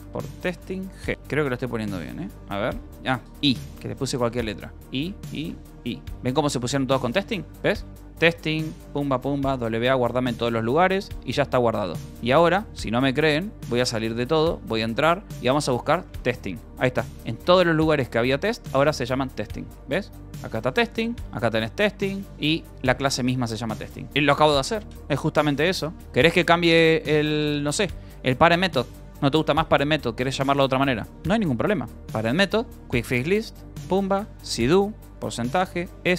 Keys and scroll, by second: 0.0-1.6 typing, 1.1 Left, 1.1 Right, 2.0 Return, 4.7 y, 7.2-10.0 typing, 11.5 q, 11.5 Return, 12.5 Return, 13.4-16.7 typing, 17.9 ctrl+n, 18.6 p, 19.7 Return, 20.9 space, 21.6 Return, 22.5 Return, 22.8-23.8 typing, 24.4 Escape, 25.0-30.4 typing, 26.3 Return, 31.5-36.1 typing, 32.9 ctrl+q.